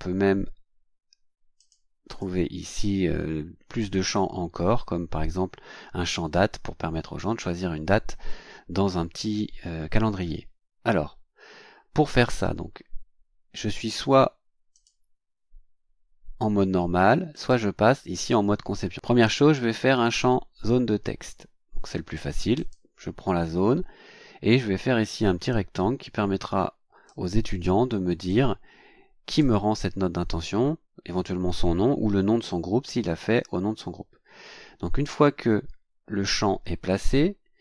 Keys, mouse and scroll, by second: 1.6 click, 2.1 click, 14.7 click, 17.3 click, 22.6 click, 25.1-27.3 drag, 28.3-29.6 drag.